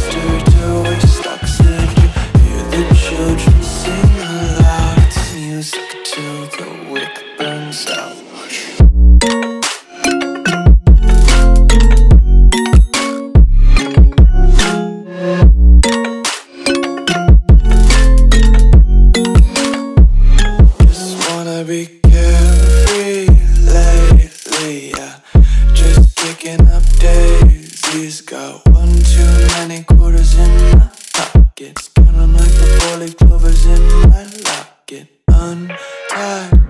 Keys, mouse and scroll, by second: 3.2 click, 5.1 Left, 6.4 click, 9.6 click, 11.2 KP_Add, 11.6 KP_9, 14.0 click, 21.4 click, 22.4-22.8 alt+scroll down 2, 24.1 click, 26.3 ctrl+Num_Lock, 26.5 s, 28.0 click, 36.4 s.